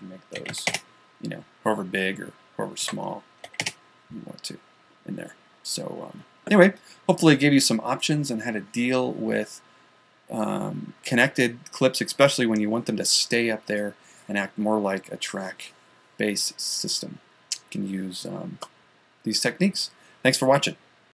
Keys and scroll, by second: 0.1-3.4 typing.